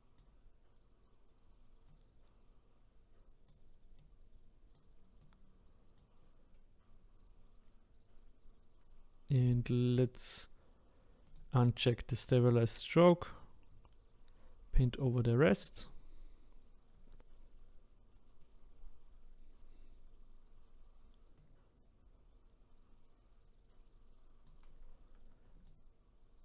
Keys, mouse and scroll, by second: 9.9-16.0 drag, 21.4-24.4 drag, 25.6-26.4 shift+right drag.